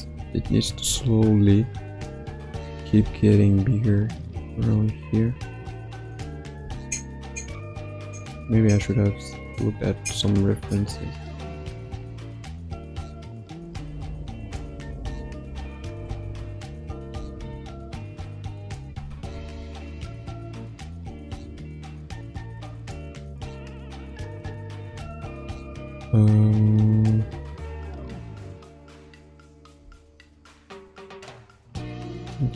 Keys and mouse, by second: 1.0 ctrl+middle click, 2.1 shift+middle click, 3.3-4.5 shift+drag, 4.7 ctrl+z, 5.4-6.5 drag, 7.4-15.9 shift+drag, 17.2 Left, 17.5 Right, 19.4 ctrl+Tab, 20.0 click, 20.4 click, 20.8-21.2 drag, 21.8 ctrl+Tab, 22.1 ctrl+z, 22.4 ctrl+z, 22.8 ctrl+z, 23.1 ctrl+z, 23.3 ctrl+z, 23.6 ctrl+z, 23.8 ctrl+z, 24.4 ctrl+z, 25.0 ctrl+Tab, 27.4-32.5 drag.